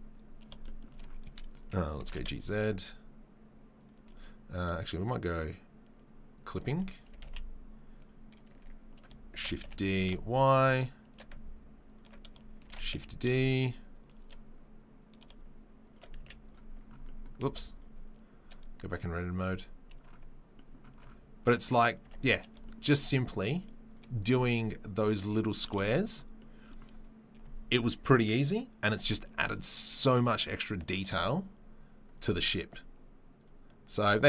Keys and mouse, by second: 1.9 g, 6.4-8.2 drag, 8.2-23.0 middle drag, 9.3 shift+d, 17.4 z, 23.0 right click, 23.9-25.3 middle drag, 25.3 right click, 25.5-33.4 shift+middle drag, 33.4-34.2 right drag.